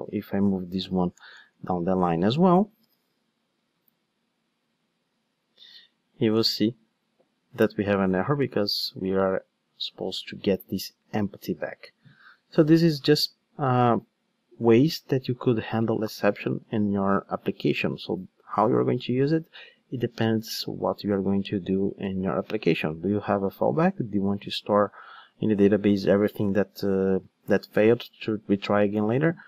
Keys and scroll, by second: 1.2 alt+shift+Down, 2.8 ctrl+shift+d, 16.9 alt+shift+Up.